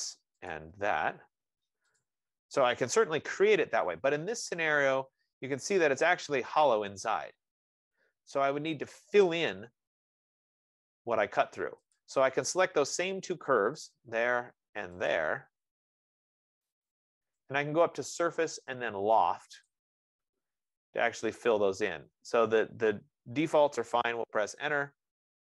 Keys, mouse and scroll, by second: 0.8 click, 3.4 Return, 9.5 right click, 9.9-11.0 scroll, 11.0-12.0 scroll down 3, 12.2 click, 13.6 click, 15.4 click, 17.2 click, 23.7 click, 24.6 Return.